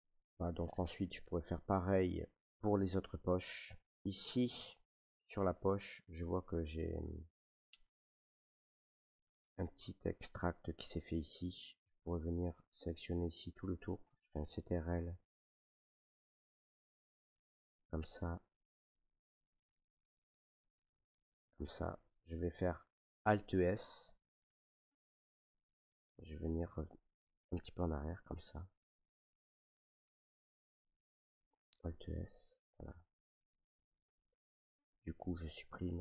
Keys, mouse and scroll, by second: 0.5 middle click, 0.8 middle click, 0.9 middle click, 0.9 middle click, 1.8 middle click, 2.1 scroll, 2.5 shift+middle click, 2.9 shift+middle click, 3.2 middle click, 3.5 middle click, 3.5 middle click, 3.6 middle click, 4.5 shift+middle click, 5.4 middle click, 5.9 shift+middle click, 7.6 middle click, 10.7 Tab, 12.0 right click, 12.8 right click, 14.1 middle click, 14.8 ctrl+right click, 14.9 ctrl+right click, 16.4 shift+middle click, 17.5 ctrl+right click, 18.4 middle click, 19.3 ctrl+right click, 20.4 shift+middle click, 21.5 ctrl+right click, 21.9 middle click, 22.5 middle click, 23.6 alt+s, 26.8 click, 27.6 middle click, 28.1 shift+middle click, 28.3 middle click, 28.4 middle click, 28.6 shift+middle click, 29.2 middle click, 29.8 shift+middle click, 30.5 middle click, 31.6 alt+s.